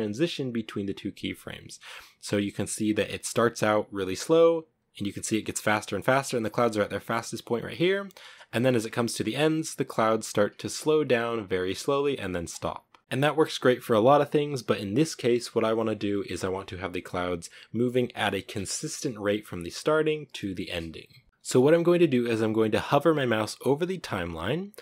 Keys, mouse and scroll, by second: 2.9-7.8 drag, 7.8-8.1 shift+middle drag, 8.1 scroll up 4, 10.9-11.6 drag, 11.6 space.